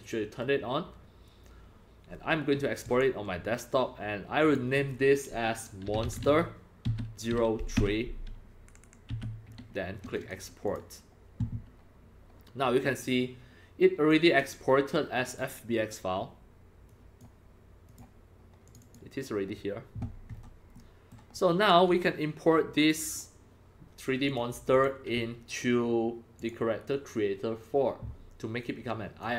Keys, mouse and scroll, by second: 2.9 click, 4.4 click, 5.7-9.2 typing, 5.7 click, 10.2 click, 10.6 click, 12.9 click, 14.1 click, 15.3 click, 17.2 click, 17.9 click, 18.7 click, 18.8 click, 20.3-21.1 scroll down 2, 21.6 right drag, 21.9-23.2 drag, 24.3 click, 24.8 click, 26.4 click, 28.6 click.